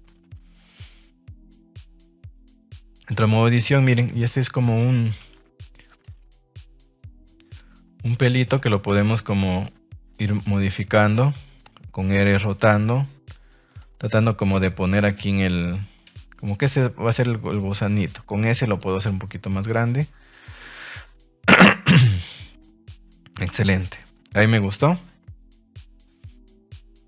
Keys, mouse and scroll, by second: 0.3 g, 1.5 click, 1.7 middle drag, 2.0 scroll up 1, 2.1 middle click, 2.6 Tab, 3.1 shift+middle click, 3.6 right click, 4.0 middle click, 4.4 r, 4.9 click, 5.1 g, 5.8 click, 6.3 middle click, 6.8 scroll up 1, 6.9 middle click, 7.5 right click, 7.8 middle click, 9.0 click, 9.2 middle click, 10.1 click, 10.4 middle click, 11.4 r, 12.3 click, 12.6 g, 13.9-15.9 middle drag, 16.4 right click, 17.8 click, 17.8 g, 18.0 s, 18.6 click, 18.8 g, 20.1 click, 20.4-20.8 middle drag, 21.9 right click, 22.2 middle click, 23.5 Tab, 23.6-23.9 middle drag, 24.3 shift+middle click, 24.5-26.0 middle drag.